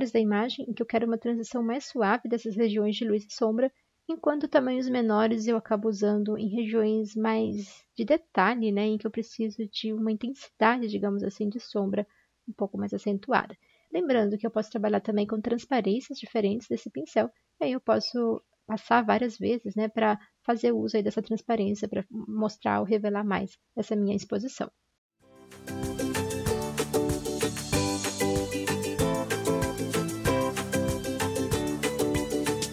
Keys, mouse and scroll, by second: 2.1 ctrl+z, 2.2 ctrl+z, 6.6-7.6 typing, 11.3 ctrl+z, 11.4 typing, 25.0 Escape, 26.6-27.0 typing, 27.0 ctrl+z, 27.9 ctrl+z, 31.7 ctrl+z.